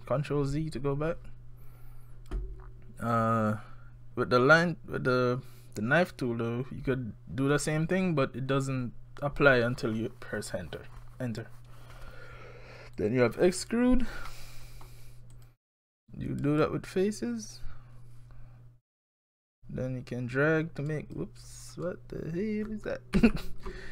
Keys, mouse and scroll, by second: 13.0 click, 14.3 middle click, 15.3 click, 18.9 click, 21.6-22.7 scroll down 5, 23.2 ctrl+z.